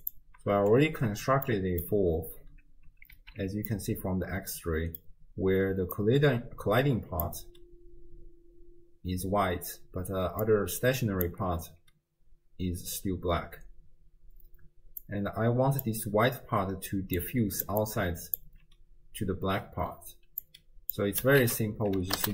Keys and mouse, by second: 0.1 ctrl+shift+click, 1.5 middle click, 3.1 alt+z, 3.8-5.0 drag, 5.7 d, 6.0-7.3 drag, 7.3 d, 7.4 d, 9.7 d, 10.0 d, 10.4 click, 11.3 d, 12.7 d, 15.1 click, 15.7 click, 16.9 d, 17.2 click, 17.7 d, 17.7 d, 17.8-18.6 d, 17.8 click, 20.5 click, 21.4 ctrl+a.